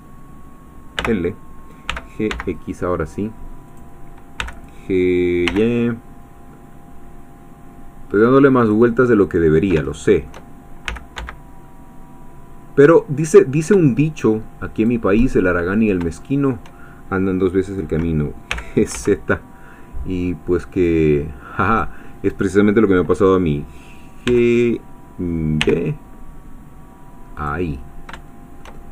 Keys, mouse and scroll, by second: 1.0 l, 1.9 g, 2.3 x, 3.7 click, 4.4 g, 5.5 y, 8.6 click, 9.0-10.5 middle drag, 10.9 g, 11.2 x, 14.7 shift+click, 15.5 shift+middle click, 16.2 shift+middle click, 18.5 g, 18.9 z, 21.7-24.3 drag, 24.3 g, 25.7 y, 27.3 click, 27.9 scroll up 1, 28.3-28.9 shift+middle drag.